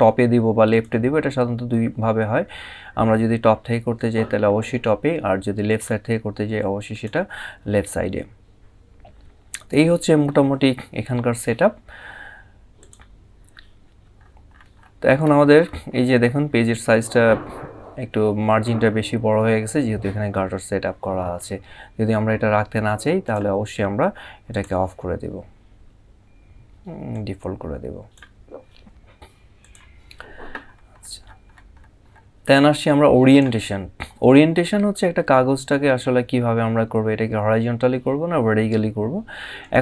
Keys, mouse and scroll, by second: 5.4 click, 12.5 click, 13.9 scroll up 1, 22.9 click, 26.8 click, 29.3 click, 30.4 scroll up 1, 33.0 click, 39.3 click.